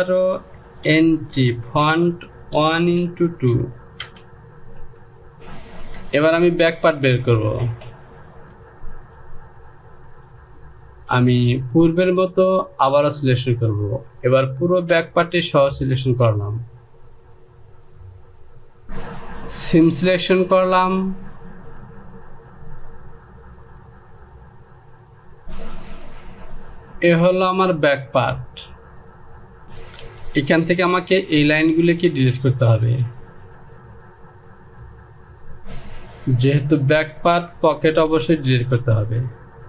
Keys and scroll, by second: 0.7-5.3 typing, 6.6 Return, 29.6 Home, 30.7 Delete.